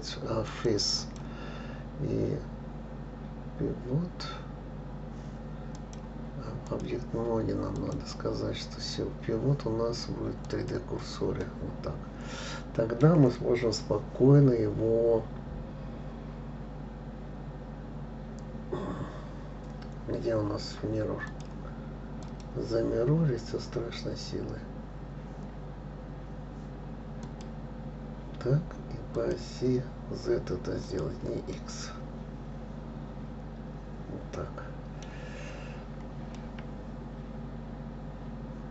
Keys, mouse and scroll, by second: 1.4-4.4 drag, 6.1-11.2 drag, 11.8-14.8 middle drag, 21.7 click, 22.6-25.6 drag, 29.5 click, 31.2 click, 31.9-35.0 middle drag, 35.8-36.8 scroll up 3, 36.8-38.7 middle drag.